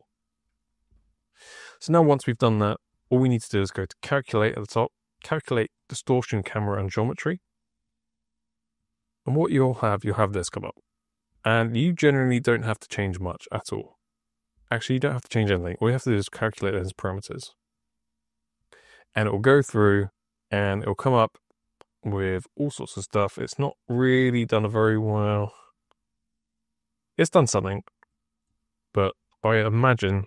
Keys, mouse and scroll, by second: 3.9 click, 5.7-7.2 drag, 8.7 click, 15.9 click, 28.0 click.